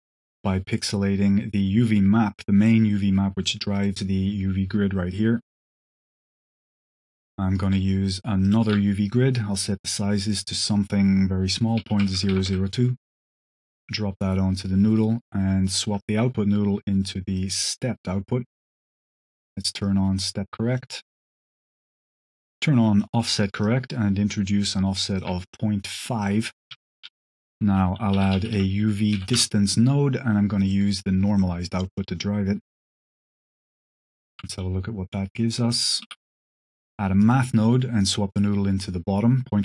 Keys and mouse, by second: 0.1-2.6 drag, 2.8 click, 3.6 click, 4.9 drag, 5.5 click, 6.5 click, 7.4 click, 8.3 click, 8.6 shift+d, 8.9 click, 9.9-12.8 drag, 12.0 KP_0, 13.0 click, 13.5-14.5 drag, 15.9-17.5 ctrl+drag, 19.7 click, 22.5 click, 23.5-25.1 ctrl+drag, 25.4 click, 25.8 click, 26.1 click, 26.9 shift+a, 30.9 click, 31.7 click, 32.5-33.0 drag, 33.2 click, 34.2 ctrl+shift+click, 38.0-38.9 drag.